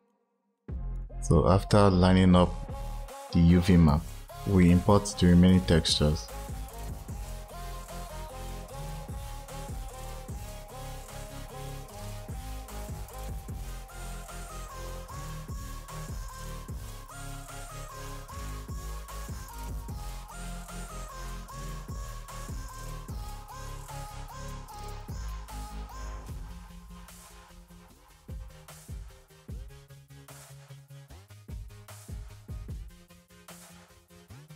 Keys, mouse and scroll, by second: 0.0 click, 0.5-8.8 drag, 8.8 shift+a, 12.1-12.7 drag, 13.8 shift+a, 16.4 drag, 17.5 click, 17.8 click, 21.5 click, 24.1 right drag, 24.4 click, 27.3 right click, 27.6-28.7 right drag, 28.7 shift+a, 29.1 click, 29.5 drag.